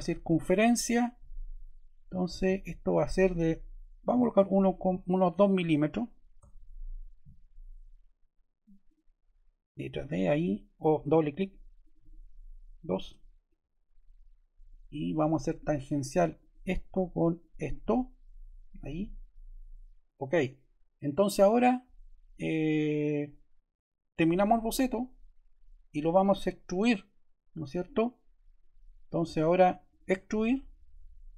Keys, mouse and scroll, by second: 4.0-6.1 typing, 8.7 click, 9.8 d, 11.0 ↺, 11.7 click, 12.7 typing, 12.9 Return, 15.3 click, 16.3 click, 17.2 click, 24.0 click, 29.8 click.